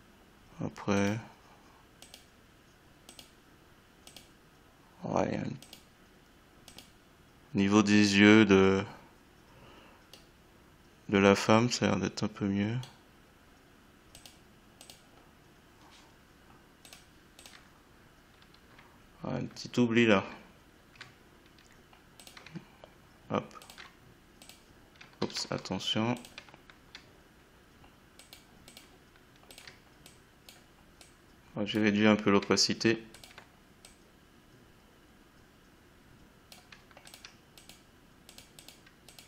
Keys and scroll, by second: 25.3 ctrl+z.